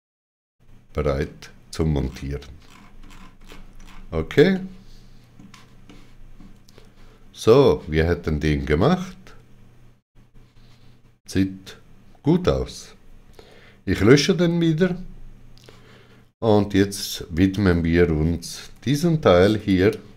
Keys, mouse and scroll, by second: 2.0-2.6 scroll down 2, 3.4 scroll down 6, 4.5 middle click, 4.5 scroll down 1, 5.8 shift+middle click, 8.8 shift+middle click, 14.4 x, 18.3-19.1 typing, 19.5 click.